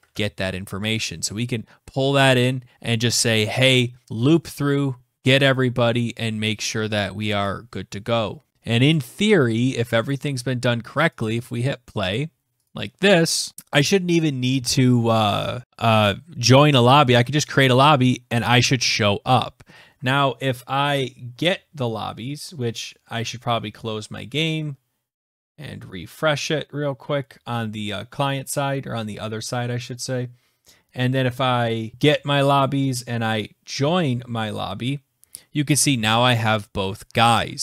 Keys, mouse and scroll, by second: 1.1-1.5 scroll, 2.2-3.0 scroll, 3.4 scroll, 4.1-4.8 scroll, 6.5-7.5 scroll, 7.5-8.5 scroll, 8.5 click, 8.7 ctrl+s, 10.6 click, 12.1 click, 13.5 click, 15.6 click, 16.8 click.